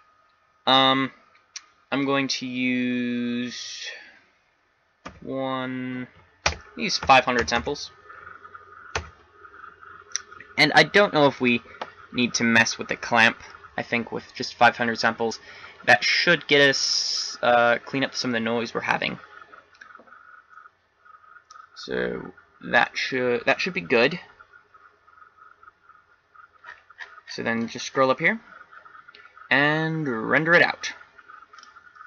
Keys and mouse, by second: 8.6 KP_0, 31.6 click.